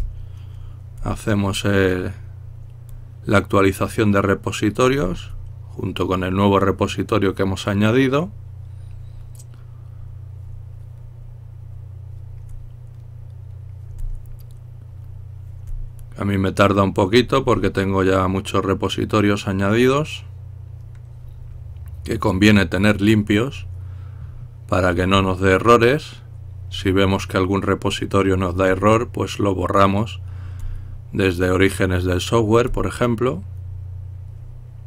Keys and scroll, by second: 1.2-1.9 typing.